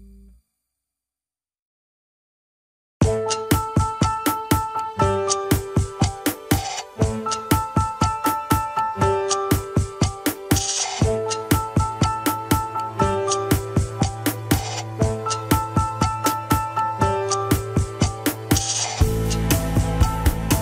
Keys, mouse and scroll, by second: 0.2 click, 0.8 Tab, 1.8-2.8 middle drag, 2.8 ctrl+l, 4.1 g, 5.6 KP_1, 6.2 g, 7.1 middle click, 7.8 click, 8.5 shift+s, 8.9 KP_1, 9.2 alt+z, 9.6 click, 9.9 Tab, 10.1 scroll up 2, 10.5 r, 14.1 Tab, 14.4 alt+z, 14.9 click, 15.3 click, 15.9 Tab, 16.9 ctrl+l, 17.4 g, 18.7 middle click, 19.0 Tab, 19.5 click, 19.9 shift+s, 20.3 KP_1.